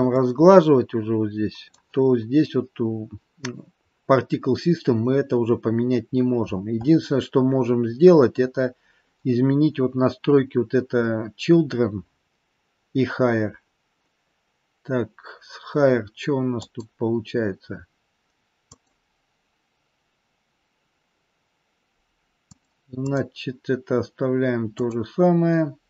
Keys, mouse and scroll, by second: 0.0 middle click, 4.3-5.4 scroll down 1, 5.4-6.1 scroll down 4, 6.1 scroll down 4, 6.4 scroll up 1, 6.7-7.7 scroll down 5, 7.8-9.3 scroll down 7, 11.5-13.1 scroll down 8, 16.5 click, 18.5 click, 22.3 click, 24.4 click, 24.7 click.